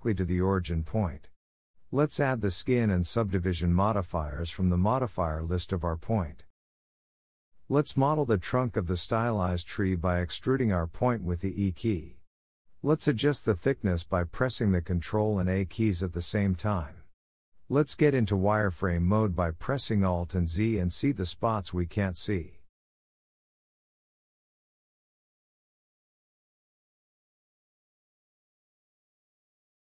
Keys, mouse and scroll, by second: 2.7-4.6 drag, 4.6-5.8 scroll up 7, 5.2 shift+middle drag, 5.8 Tab, 6.3 1, 6.6 click, 7.5 KP_3, 8.2 scroll down 1, 8.5 shift+middle click, 8.8 scroll up 1, 9.1 e, 11.3 shift+middle click, 11.8 e, 13.7 shift+middle click, 14.1 e, 15.7 scroll down 1, 16.0 shift+middle click, 16.3-16.8 scroll down 2, 16.8 shift+middle click, 17.1 e, 18.9 shift+middle click, 19.5 ctrl+a, 20.7 e, 21.7 ctrl+a, 22.6 shift+middle click, 22.9 e, 23.7 ctrl+a, 24.7 click, 25.4 e, 27.4 ctrl+a, 28.6 e, 29.5 ctrl+a.